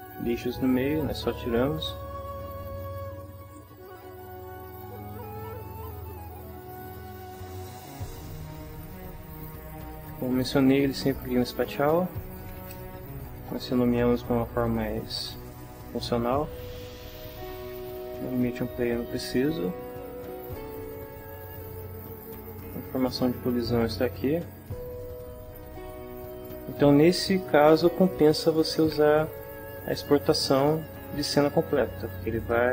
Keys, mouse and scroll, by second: 1.8 click, 3.2 ctrl+middle click, 4.8-6.0 drag, 6.7 click, 7.4 shift+middle click, 8.3 ctrl+shift+middle click, 9.4 ctrl+shift+middle click, 11.0 click, 12.2-13.5 typing, 17.3 click, 17.8 click, 19.3 Delete, 20.4 click, 22.1 click, 23.6-25.2 middle drag.